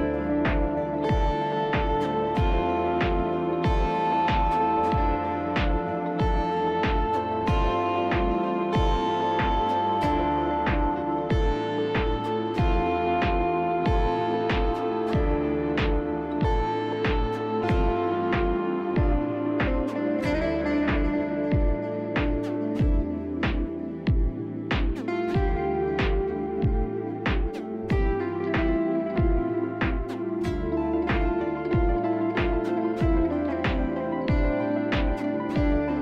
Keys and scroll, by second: 2.3 ctrl+z, 3.4 z, 20.9 z, 21.3 b, 25.1 b, 28.6 Delete, 31.1 F4, 31.4 f.